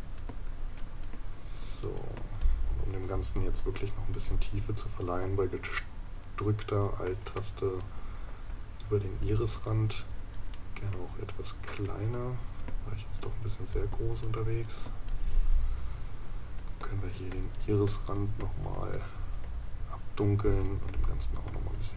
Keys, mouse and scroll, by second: 10.6 right click.